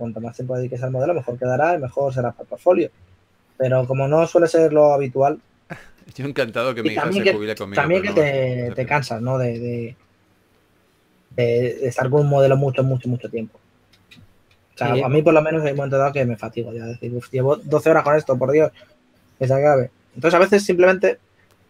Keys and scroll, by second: 4.2 4, 10.5-11.0 typing.